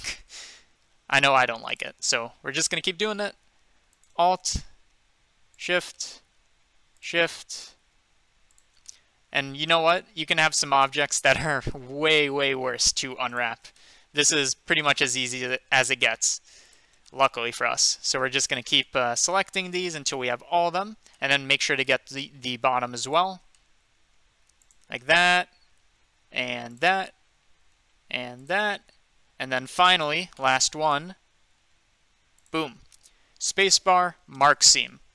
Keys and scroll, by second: 34.4 Return.